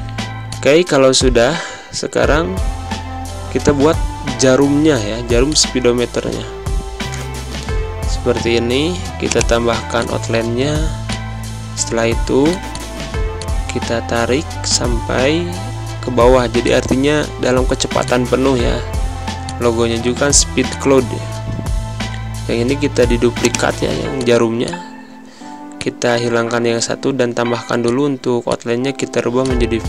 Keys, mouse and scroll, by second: 0.1 space, 0.3 click, 0.6 space, 5.3 click, 9.1 click, 23.9 click, 27.7 click.